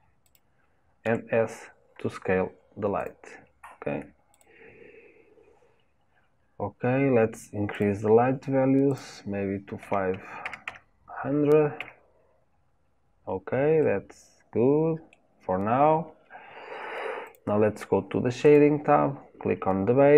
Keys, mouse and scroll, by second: 1.1 s, 4.3 click, 7.7 click, 8.9-10.6 drag, 10.6 KP_0, 13.8-17.3 middle drag, 17.3 click, 18.5 click.